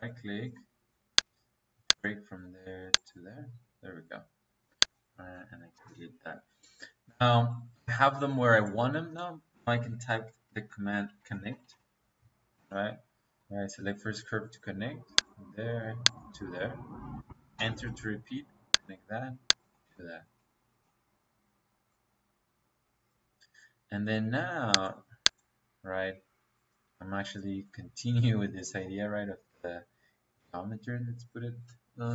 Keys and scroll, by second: 5.6 Delete, 9.2 Escape, 11.0-12.5 typing, 17.4 space, 25.6 Escape.